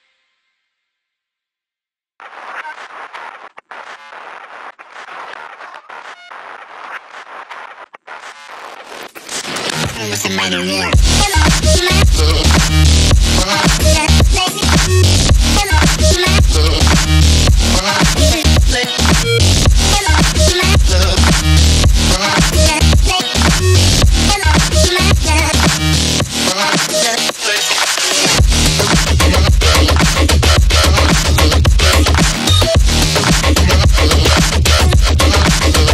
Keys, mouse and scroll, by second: 2.1 click, 6.3 click, 10.6 click, 15.6 ctrl+z, 16.6 click, 21.1 click, 24.5 click, 27.4 click, 27.7 space, 27.9 click, 28.1-28.9 space, 32.8 click.